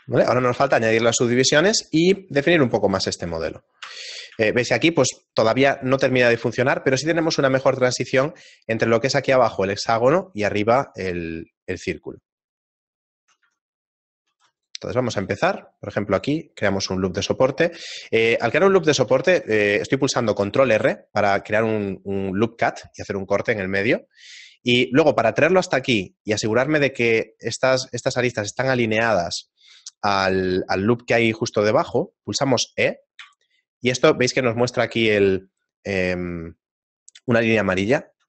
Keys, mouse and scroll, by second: 0.1 shift+middle click, 2.6 right click, 3.8 ctrl+2, 4.5 shift+middle click, 6.2 shift+middle click, 10.9 shift+middle click, 14.3 Tab, 14.3-15.2 scroll up 4, 15.2 ctrl+r, 18.7 ctrl+z, 19.4 ctrl+r.